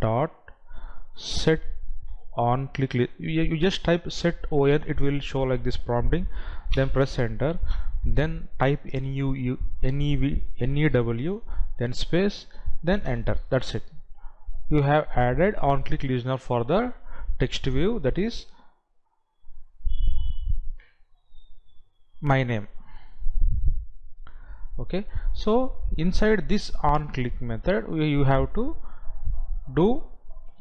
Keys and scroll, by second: 12.2 space.